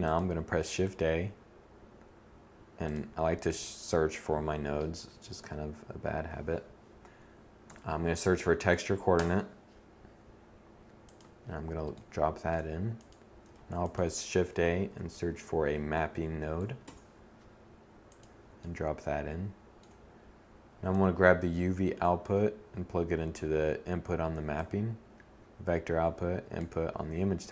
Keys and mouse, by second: 9.9-12.3 drag, 12.3 shift+a, 14.1 p, 16.9-22.1 drag, 23.3-25.3 drag.